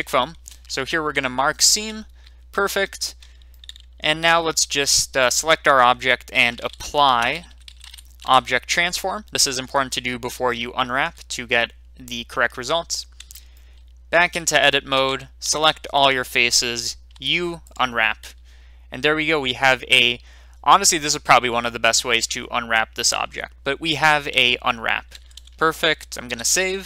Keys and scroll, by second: 1.5 Return, 4.0 Tab, 4.0 Return, 6.6-7.9 typing, 8.2 Return, 13.2 Tab, 15.4 3, 17.1 u, 25.1 Tab, 26.3 ctrl+s.